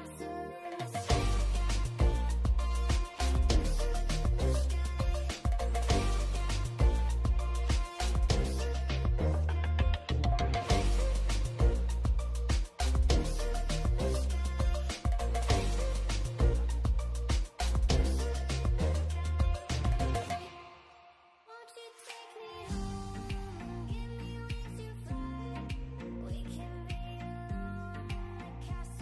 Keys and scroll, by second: 0.8 b, 2.7 ctrl+z, 3.5 ctrl+z, 5.3-5.7 scroll down 1, 6.2 scroll down 1, 6.5 n, 6.8-7.1 scroll up 1, 7.1 p, 8.3 b, 9.1 ctrl+z, 11.2 scroll down 1, 11.5 n, 11.7 scroll up 1, 16.4 b, 16.9 scroll down 1, 17.6 ctrl+z, 19.0 scroll up 1, 20.4 scroll down 1, 21.3 scroll up 1, 21.5 n, 21.6-22.2 scroll down 1, 22.6 scroll up 1.